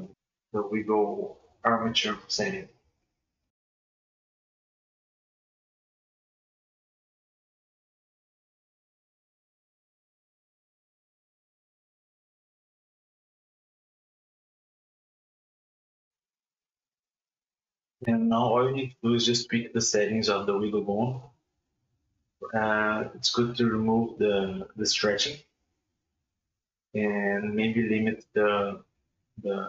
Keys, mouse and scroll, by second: 1.0 space, 1.7 click, 3.2-5.9 drag, 7.0-8.8 drag, 10.0 right click, 10.7 space, 11.2 g, 15.7-17.1 shift+middle drag, 17.1 KP_1, 17.8 g, 20.4 click, 21.6 click, 22.0-22.7 middle drag, 22.7-23.2 scroll down 1, 23.2-23.6 middle drag, 23.6 g, 28.0 space.